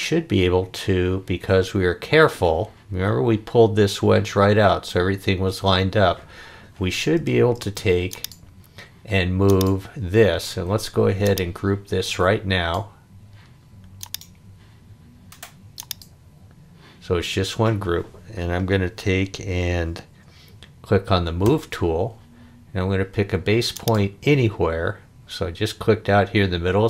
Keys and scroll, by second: 7.6 space, 21.4 m.